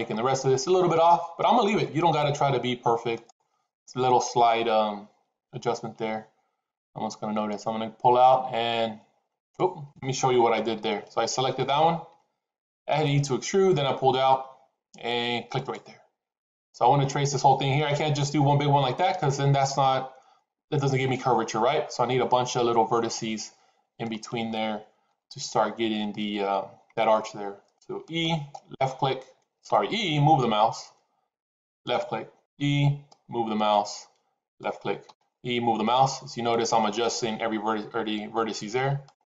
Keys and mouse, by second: 2.0 g, 5.8 e, 10.5 ctrl+z, 11.5 click, 12.8 e, 17.8 e, 25.0 e, 29.5 e, 32.4 e, 34.9 e.